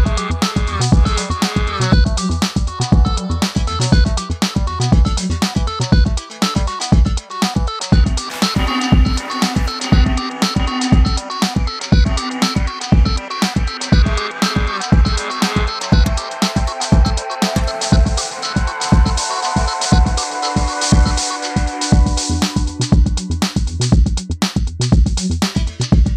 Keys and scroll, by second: 5.3 2, 5.5 Return, 6.2 Return, 9.9-11.5 typing.